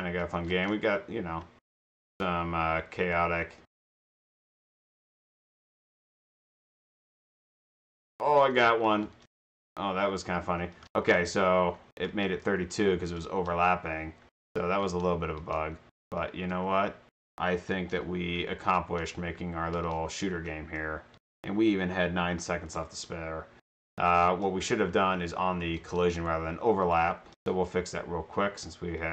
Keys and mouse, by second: 0.5 Left, 0.5 space, 2.8 a, 3.0 d, 3.7 space, 4.1 a, 5.9-9.1 typing, 10.4-15.0 typing, 16.2 d, 17.9-19.1 typing, 20.6 d, 22.3 a, 22.8 space, 24.0 d, 24.4 space, 26.8 click.